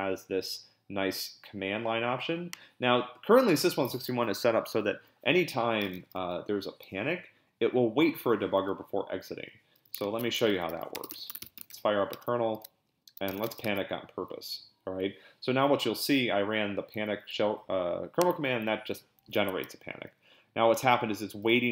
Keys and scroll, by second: 10.0 ctrl+l, 10.3-14.0 typing.